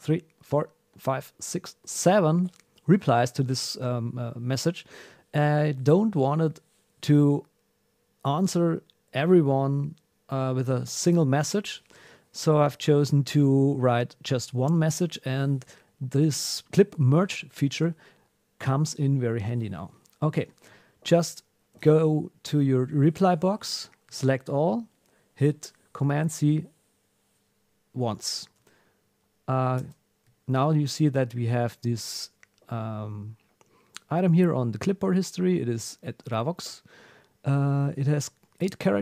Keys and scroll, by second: 21.7 super+r, 24.1 super+a, 26.2 super+c, 28.0 super+w, 30.4 alt+super+\, 31.2 Down.